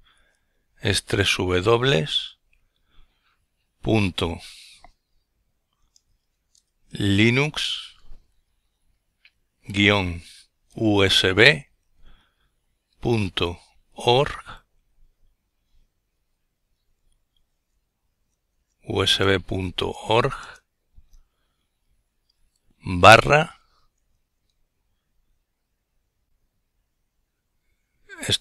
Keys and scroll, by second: 2.1 typing, 6.2-6.9 typing, 8.4-9.9 typing, 18.8 /.